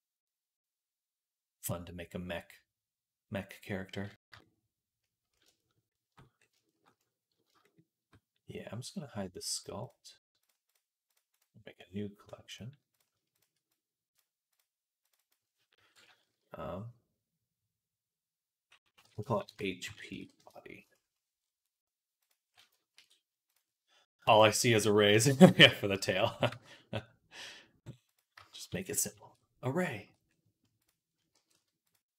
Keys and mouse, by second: 9.4 click, 9.4 middle click, 10.3 click, 10.4 middle click, 10.9 click, 11.0 middle click, 11.1-24.9 right drag, 12.7 click, 12.7 middle click, 13.6 click, 13.6 middle click, 14.4-22.1 drag, 14.4-22.1 middle drag, 22.8 ctrl+s, 23.3 click, 23.3 middle click, 24.9 KP_1, 26.3 g, 28.5 shift+c, 29.4-31.2 shift+drag, 31.2-32.1 right drag, 31.2 g.